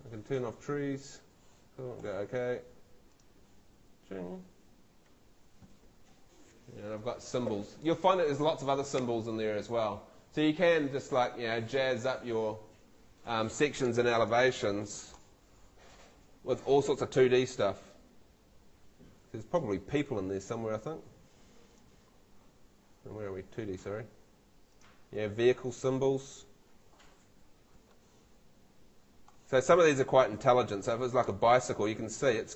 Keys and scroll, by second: 5.1 Escape.